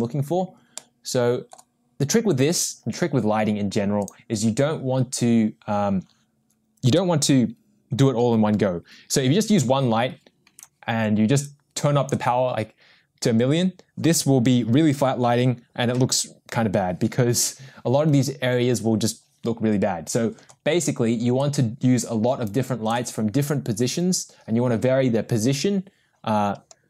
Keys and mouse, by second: 1.3 middle click, 4.0 click, 11.6 click, 21.4-23.0 drag.